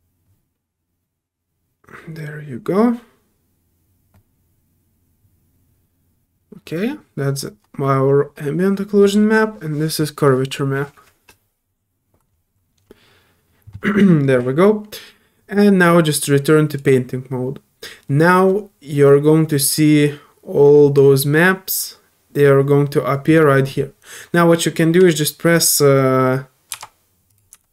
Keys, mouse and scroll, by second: 2.8-14.9 drag, 2.8-14.9 right drag, 16.7 click, 19.7-20.9 drag, 27.3 click, 27.3 2.